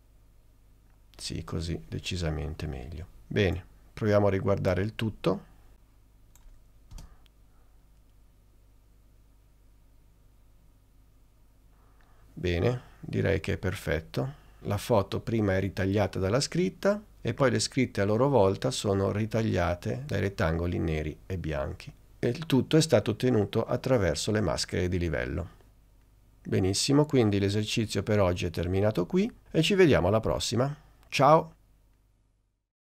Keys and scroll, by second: 7.1 space.